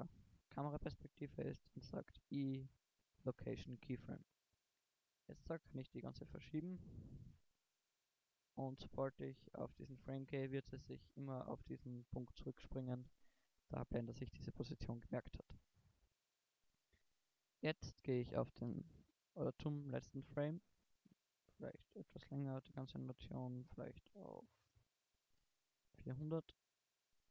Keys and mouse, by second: 1.6 i, 6.0 g, 7.8 g, 9.7 Right, 10.2 Left, 16.8 shift+Right, 25.9 0, 27.0 shift+Right.